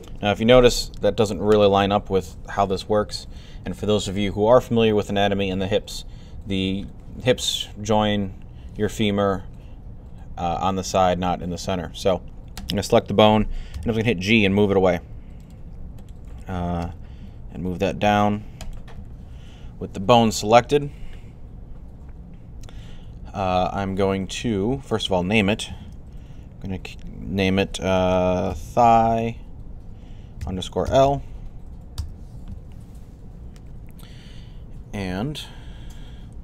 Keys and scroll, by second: 13.6 g, 16.7 g, 27.6-30.7 typing.